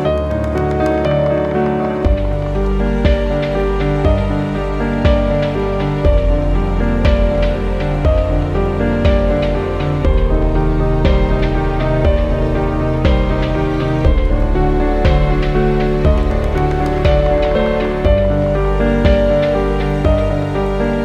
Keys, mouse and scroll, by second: 0.6 click, 1.7 ctrl+t, 2.1 scroll down 1, 3.0 click, 8.7 scroll down 1, 10.9 click, 14.8-15.2 typing, 17.2 typing, 17.9 click, 19.4 click, 20.3 scroll up 1.